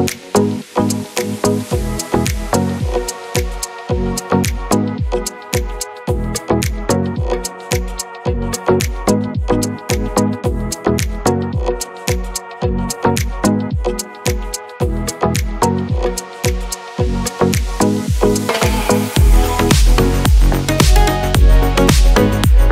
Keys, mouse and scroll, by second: 9.5 click.